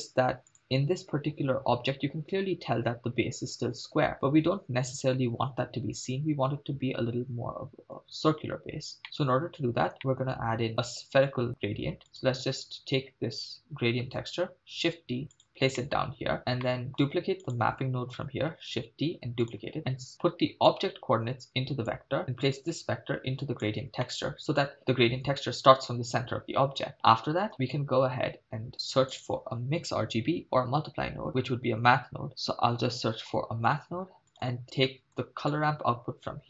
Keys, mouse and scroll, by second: 0.5 click, 9.0 middle click, 9.4-10.0 scroll down 2, 10.0 middle click, 12.1 click, 14.1 shift+d, 15.3 click, 15.8 middle click, 16.4 scroll up 2, 16.6 middle click, 17.5 click, 18.6 shift+d, 19.4 click, 20.7 click, 21.0-21.9 drag, 22.5-23.6 drag, 24.0 middle click, 26.9 middle click, 26.9-27.3 scroll up 2, 28.8 shift+a, 34.3 middle click, 34.9 middle click, 35.5-36.4 drag.